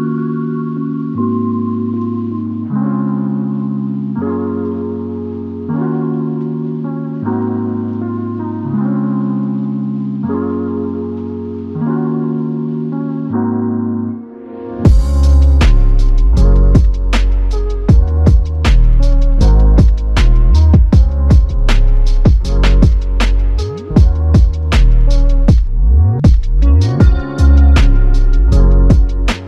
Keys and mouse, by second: 4.9 alt+click, 6.7 ctrl+click, 8.0 ctrl+click, 8.9 ctrl+click, 11.0 ctrl+click, 13.1 alt+click, 14.5 ctrl+alt+click, 15.4 alt+click, 17.2 alt+click, 20.6 alt+click, 28.7 ctrl+z.